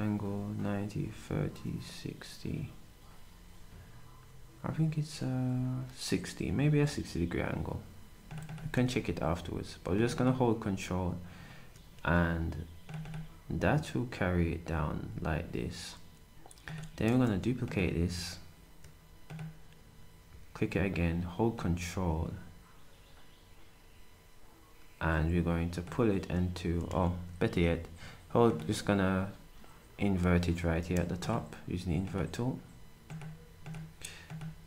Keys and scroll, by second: 8.8 s, 14.8 s, 17.1 d.